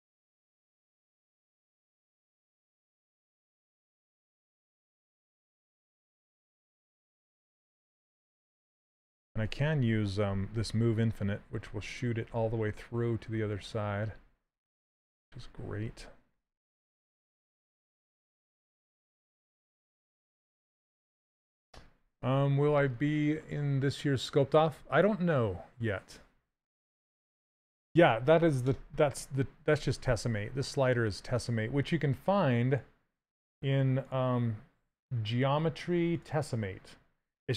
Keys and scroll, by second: 11.3 s.